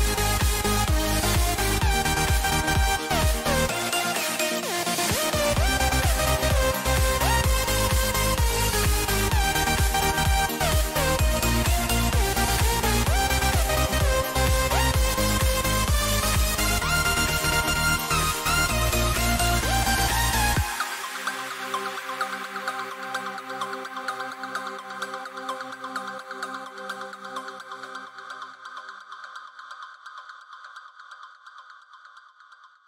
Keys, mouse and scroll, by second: 0.1-2.4 right drag, 4.4-9.6 right drag, 9.6 a, 11.5-13.3 middle drag, 14.8-17.7 middle drag, 19.8-22.7 middle drag, 23.6-26.0 middle drag, 24.8 a, 25.0 a, 26.0-27.7 right drag, 26.9-31.6 middle drag, 28.9-30.7 right drag, 31.9-32.8 drag.